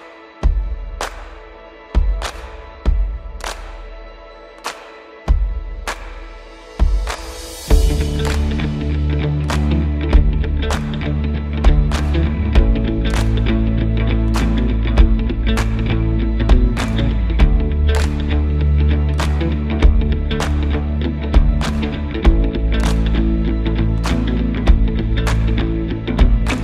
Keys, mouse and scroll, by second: 1.2-2.1 drag, 2.6-3.9 typing, 9.7-26.6 drag, 9.7 typing, 11.4 drag, 13.0 click, 14.1-14.4 click.